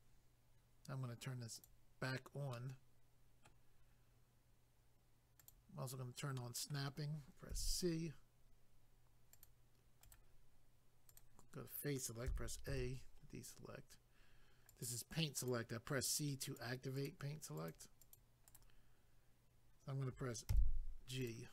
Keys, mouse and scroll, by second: 1.5 click, 1.6 click, 2.5 middle click, 5.4 click, 5.5 click, 6.4 middle click, 7.5 c, 8.5-9.3 scroll up 1, 9.3 click, 9.4 click, 10.0 right click, 10.1 right click, 11.1 click, 11.2 click, 12.3 a, 13.2-14.7 scroll up 1, 14.7 click, 14.8 click, 15.4 click, 15.5 click, 16.0 click, 16.2 click, 16.5 click, 16.6 click, 17.0 click, 17.1 double click, 17.6 click, 17.7 click, 18.0 click, 18.2 double click, 18.5 right click, 18.6 right click, 21.2 click, 21.3 click.